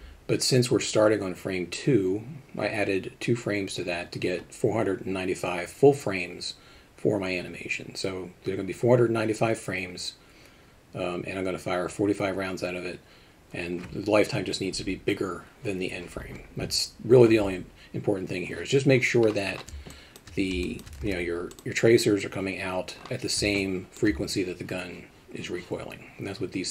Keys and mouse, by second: 19.9 drag, 20.6 alt+shift+middle drag, 21.0 alt+a, 21.5 click, 23.6-24.0 alt+shift+middle drag.